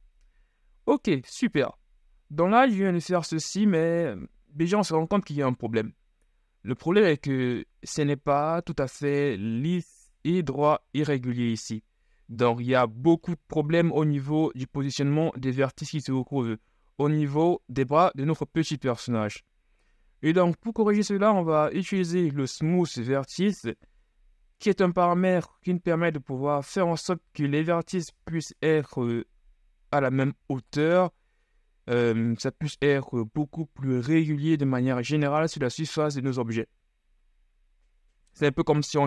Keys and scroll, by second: 17.9 KP_1.